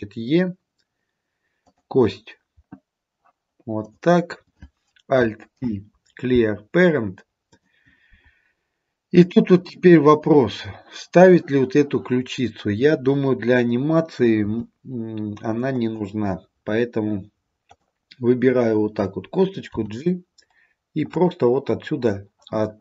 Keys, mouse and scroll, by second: 3.9 click, 5.7 alt+p, 14.5 g, 17.8 click, 19.8 g.